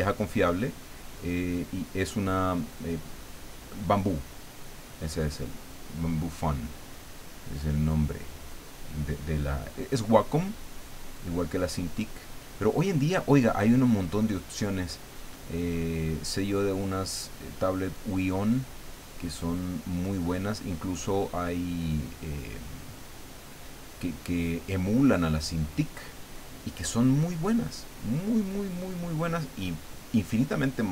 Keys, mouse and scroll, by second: 0.9-2.1 drag, 3.0-6.4 drag, 7.2-10.6 drag, 11.2-14.3 drag, 15.0-17.5 drag, 18.6-21.2 drag, 21.8-24.3 drag, 25.0-27.4 drag, 28.1-30.2 drag, 30.8-30.9 drag.